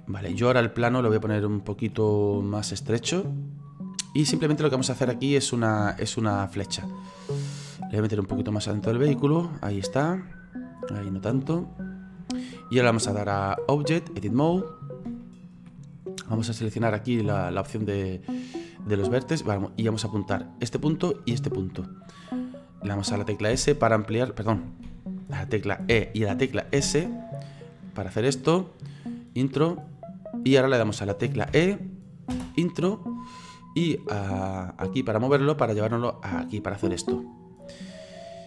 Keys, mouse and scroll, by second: 2.5-5.9 drag, 5.9 s, 7.5 click, 8.7-9.7 drag, 9.7-11.5 middle drag, 11.5-14.7 drag, 14.7-15.7 shift+middle drag, 15.7-18.8 scroll up 3, 19.9 right click, 21.2 shift+right click, 23.6 s, 24.9 ctrl+z, 25.9 e, 31.5 e, 33.5 click, 35.7 click.